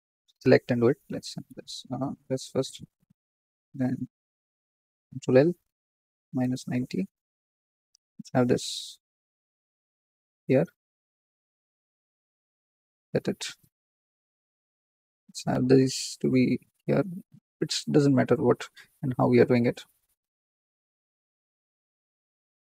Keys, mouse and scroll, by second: 1.0-1.4 ctrl+z, 2.2 g, 2.9 scroll down 2, 3.2 click, 3.5 click, 4.9 ctrl+l, 5.9 r, 7.4 g, 12.4 g, 14.9 click, 16.4 g, 18.2 click, 19.5 click, 20.2 click, 20.6 ctrl+l, 21.8 g.